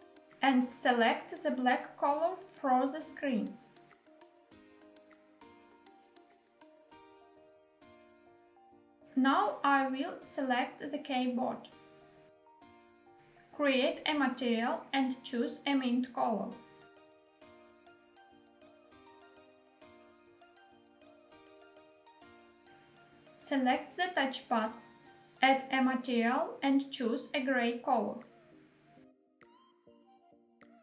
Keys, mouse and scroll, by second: 1.1 click, 10.1 click, 13.5 click, 14.9 click, 16.8 click, 24.8 click, 26.7 click, 27.7 click, 29.0 click.